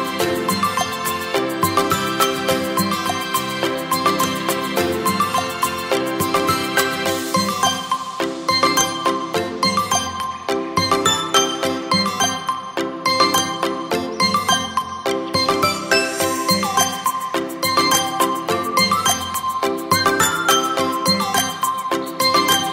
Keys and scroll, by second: 2.1 ctrl+a, 6.4 v, 18.6 9.